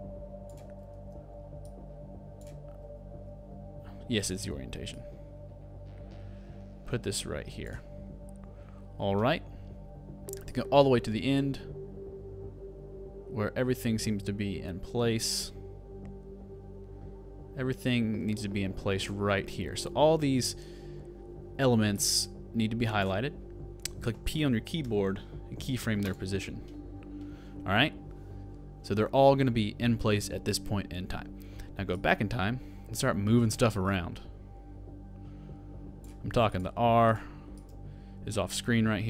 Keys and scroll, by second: 0.8 super+z, 2.9 super+z.